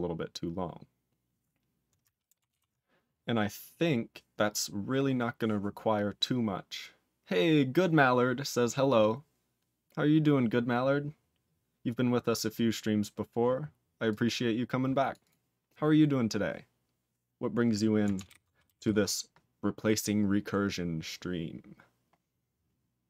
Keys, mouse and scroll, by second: 0.9 scroll down 1, 2.5 ctrl+s, 2.8-4.9 scroll down 3, 4.9-6.2 scroll up 9, 9.9-11.2 scroll up 1, 14.0 click, 15.1 click, 15.2 click, 18.2 ctrl+alt+b, 18.8 ctrl+s, 20.5 scroll up 2, 22.0 scroll up 3.